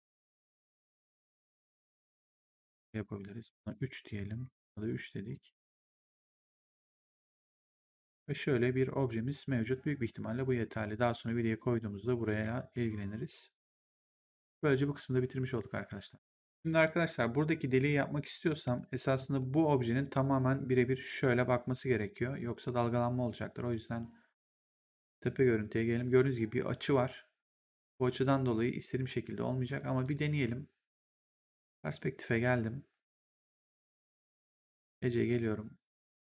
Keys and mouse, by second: 1.8 w, 2.3 click, 3.4 click, 3.6 3, 4.1 click, 4.3 3, 5.6 click, 7.1 click, 16.4 click, 18.6 click, 19.3 ctrl+1, 22.7 right click, 25.0 click, 29.6 right click, 31.2 click, 33.5 right click, 34.0 click.